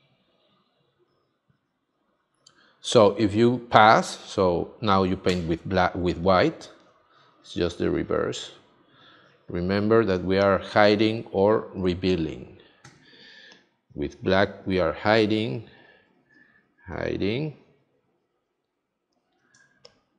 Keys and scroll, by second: 5.3 x, 10.1 space, 12.8 x, 19.5 space.